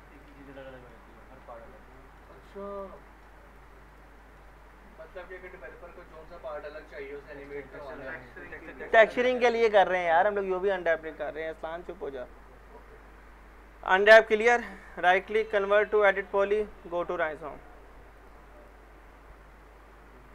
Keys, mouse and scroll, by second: 0.1 click, 0.3 z, 0.5-1.2 alt+middle click, 1.1 scroll up 1, 1.9 alt+middle click, 2.3 click, 3.0 middle click, 3.5 click, 4.2 alt+middle click, 5.4 click, 14.0 click, 14.9 right click, 16.1 click.